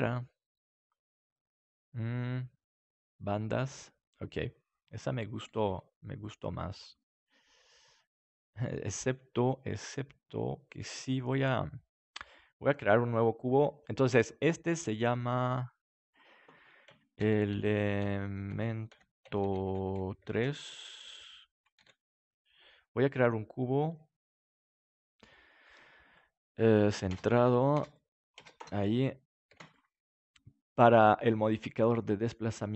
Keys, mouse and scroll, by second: 2.8-4.5 drag, 5.6 s, 6.7 click, 6.9-8.4 middle drag, 11.5-13.9 middle drag, 15.8-20.3 drag, 21.7 ctrl+s, 24.1-25.9 drag, 26.9-30.0 drag, 29.4 ctrl+s, 30.2 right click, 32.6 click.